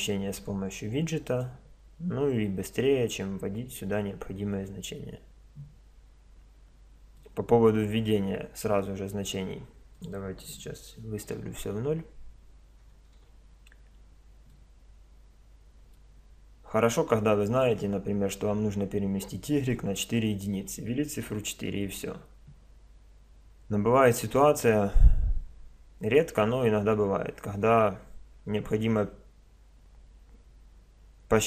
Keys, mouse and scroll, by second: 7.2-9.0 middle drag, 9.0-11.7 drag, 11.8 click, 14.5-31.4 middle drag.